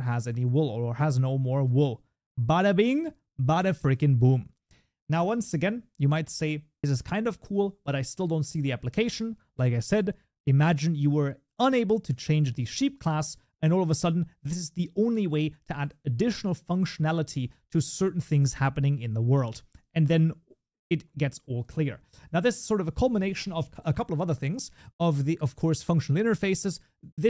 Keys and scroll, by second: 6.7 shift+Escape.